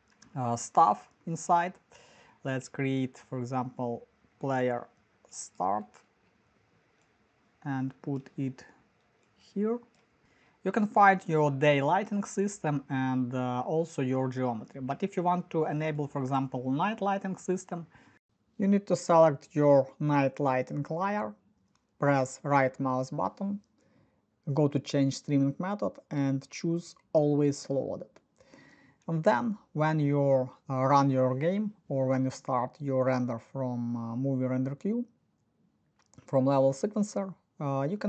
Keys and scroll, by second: 0.0-2.4 typing, 2.4 Escape, 4.1 f, 6.2-7.0 typing, 12.2 Escape.